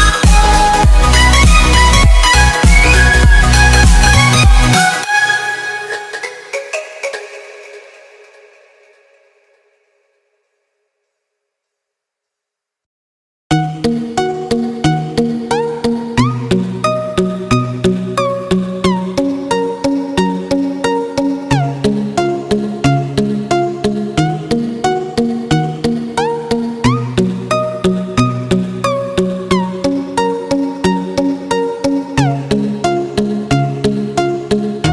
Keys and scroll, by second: 5.5 ctrl+alt+shift+e, 7.5 ctrl+space, 8.5 space, 10.7 ctrl+space, 11.1 z, 11.7 space, 13.5 z, 15.4 ctrl+z, 18.0 F5, 19.7 z, 24.1-25.8 typing, 24.3 ctrl+z, 26.4 ctrl+z, 31.0 x, 33.2 x.